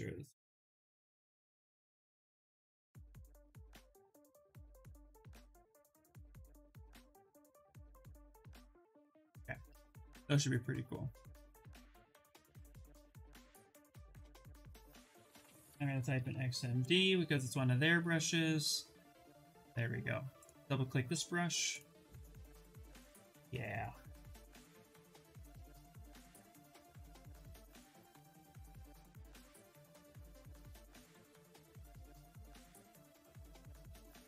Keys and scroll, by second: 0.0-0.9 typing, 2.8 BackSpace, 14.3 BackSpace, 15.4 x, 15.7 m, 16.3 d.